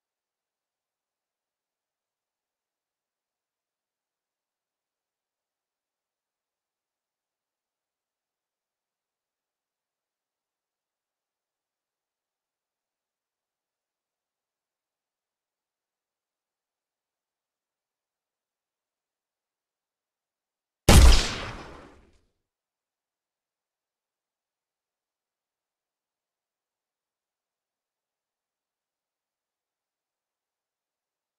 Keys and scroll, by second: 1.3 w, 5.5 space, 6.9 w, 8.0 space, 8.4 w, 9.2 space, 11.0 w, 21.6 w, 21.9 d, 23.1 w, 24.0 space, 24.5 w, 26.1 d, 26.5 w, 28.2 a, 28.9 w, 29.4 s, 30.5 a.